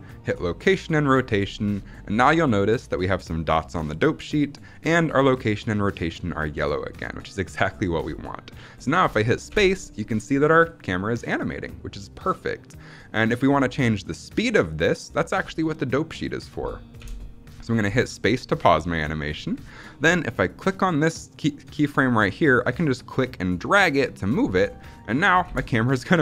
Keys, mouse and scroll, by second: 9.4 space, 16.9 space, 20.5-21.8 drag, 22.6-24.5 drag, 25.0 click, 25.3 space.